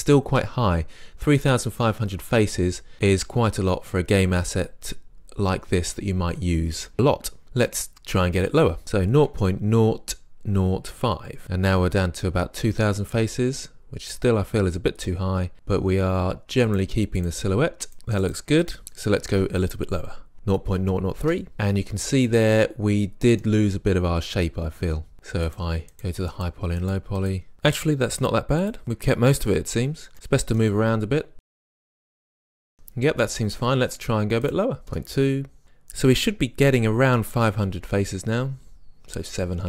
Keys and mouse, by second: 0.0 click, 0.1-1.1 middle drag, 14.7-16.5 middle drag, 16.7 click, 21.6-23.2 middle drag, 25.5 click, 31.7 click, 32.4-33.3 middle drag, 34.5 click, 34.8-39.4 middle drag.